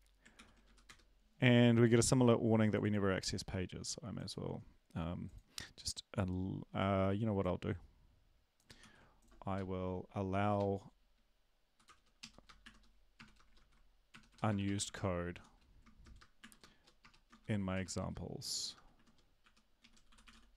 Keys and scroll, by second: 0.3 ctrl+l, 0.6 Up, 0.8 Return, 8.8 ctrl+c, 9.5 Up, 10.2-11.7 Up, 11.8 Return, 12.2 Up, 12.6 !, 13.5 ctrl+v, 14.1 BackSpace, 14.3 BackSpace, 14.5 BackSpace, 14.8 ctrl+v, 14.8 BackSpace, 15.3 Home, 16.4 @, 17.3 shift+End, 17.7 BackSpace, 19.4-20.1 typing.